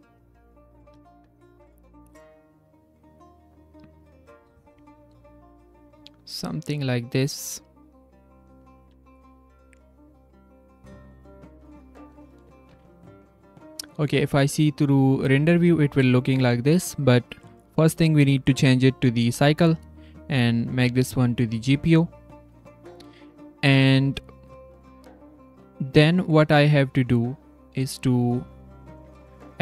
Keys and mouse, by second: 3.5-5.0 drag, 7.8 click, 8.8 g, 12.5 click, 12.5 s, 12.8 z, 18.0-19.0 drag, 19.6 click, 19.9-20.7 drag, 28.2 z, 28.9 Tab.